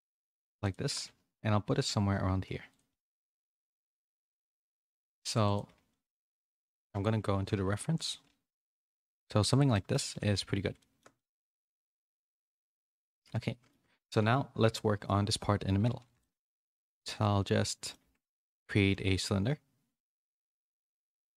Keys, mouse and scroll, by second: 0.1 s, 0.8 g, 3.3 middle click, 3.7 s, 5.6 s, 6.7 KP_1, 7.6 z, 8.2 s, 9.7 middle click, 10.0 z, 10.7 shift+middle click, 11.1 scroll up 1, 11.3 middle click, 12.0 g, 12.7 Tab, 13.0 a, 13.1 a, 13.3 middle click, 14.2 a, 15.8 a, 15.9 a, 16.2 middle click, 16.5 click, 16.8 Tab, 16.9 3, 17.6 middle click, 18.0 Tab, 18.9 shift+a.